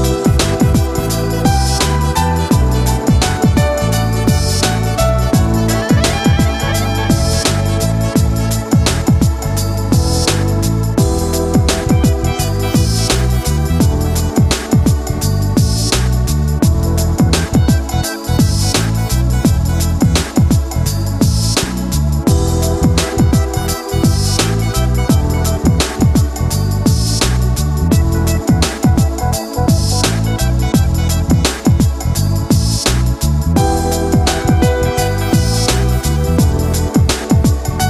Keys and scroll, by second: 1.8 ctrl+z.